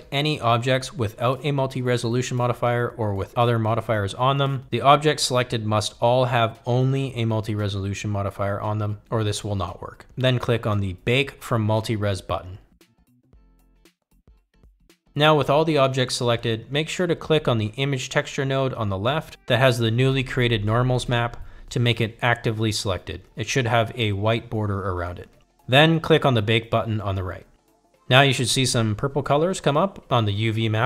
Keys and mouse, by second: 3.9 click, 6.4 shift+click, 13.8 click, 28.6 click.